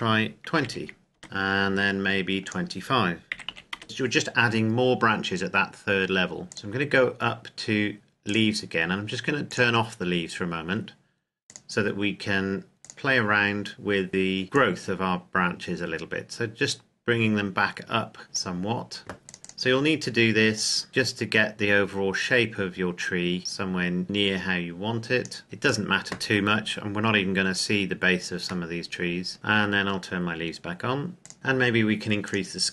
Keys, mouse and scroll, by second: 0.5 KP_2, 1.1 KP_Enter, 2.4 click, 3.3 KP_2, 3.4 KP_5, 3.7 KP_Enter, 5.8-6.4 scroll down 1, 6.4 click, 12.9-14.4 scroll down 1, 14.7 click, 20.8-25.2 drag, 27.7-28.7 scroll down 1, 28.9 middle drag, 29.3-30.6 scroll up 1, 31.1 click, 31.3-31.7 scroll up 1, 32.2 click.